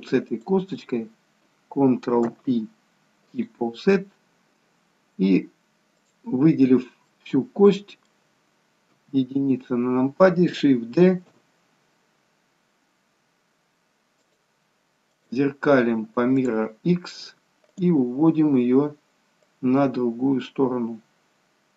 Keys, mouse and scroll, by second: 0.3 shift+click, 2.3 ctrl+p, 6.0 click, 7.1 middle click, 9.0 KP_1, 11.1 shift+d, 17.6 click.